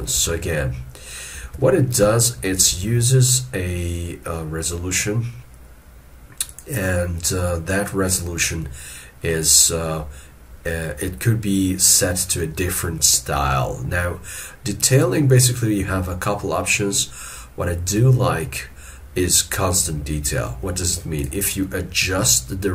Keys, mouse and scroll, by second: 0.2 alt+e, 2.7 ctrl+z, 4.7 middle click.